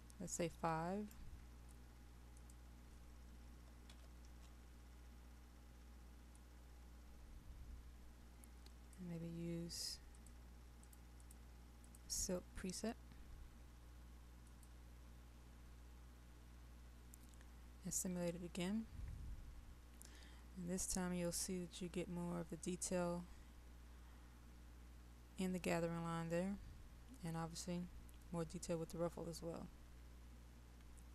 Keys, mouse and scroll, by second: 0.7 right click, 13.3 click.